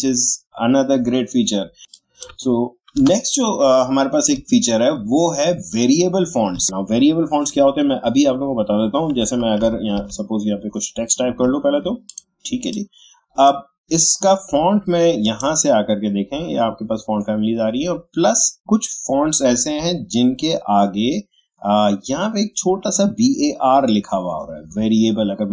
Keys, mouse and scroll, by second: 1.8 click, 1.9 click, 2.9 Delete, 4.9 alt+scroll up 1, 9.2 Caps_Lock, 9.6 typing, 11.3 x, 12.0 space, 18.1-20.2 scroll up 1, 24.7-25.2 scroll up 1, 25.2-25.5 shift+scroll down 1.